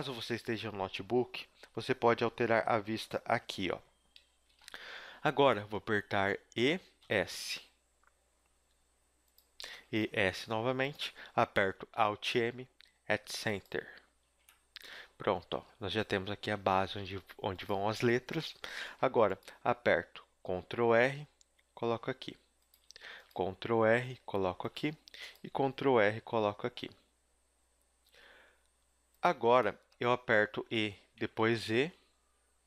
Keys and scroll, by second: 4.5 Escape, 6.5 e, 9.7 e, 12.0 alt+m, 14.2 a, 16.5 a, 16.8 s, 18.0 a, 18.8 ctrl+r, 22.8 a, 23.1 ctrl+r, 24.7 a, 25.1 ctrl+r, 29.3 a, 30.5 a, 31.1 e.